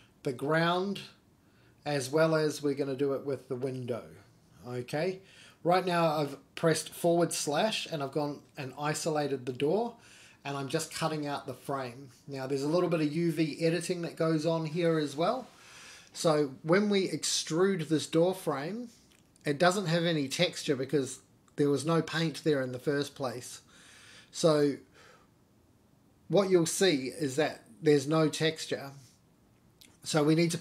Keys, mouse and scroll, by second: 0.0 middle click, 0.5 middle click, 1.4 /, 1.8 scroll up 1, 1.9 middle drag, 2.2-2.7 scroll down 2, 2.5 middle click, 3.4 KP_1, 4.0 scroll down 2, 4.3 shift+middle click, 4.7-5.4 scroll up 1, 5.4 Tab, 6.7 click, 7.6 click, 9.6 ctrl+r, 12.9 ctrl+r, 16.6 ctrl+r, 19.3-19.6 scroll down 1, 19.7 middle click, 20.5 click, 20.9 3, 21.0 click, 21.4 shift+click, 21.8 middle click, 22.2 shift+click, 22.6 middle click, 23.1 shift+d, 24.4 p, 28.6 middle click, 29.0-29.3 scroll down 1, 29.3 Tab, 29.4 click.